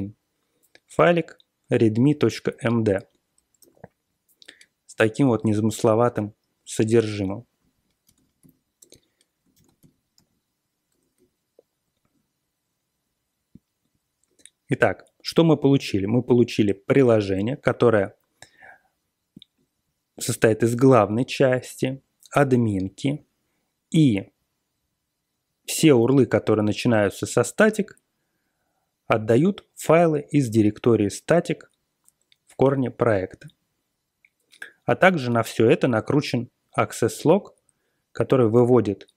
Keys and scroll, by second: 3.5 Return, 5.2 super+=, 5.3 super+=, 8.0 ctrl+x, 8.3 b, 8.7 Return, 9.5 ctrl+x, 9.7 b, 10.1 s, 10.8 Return.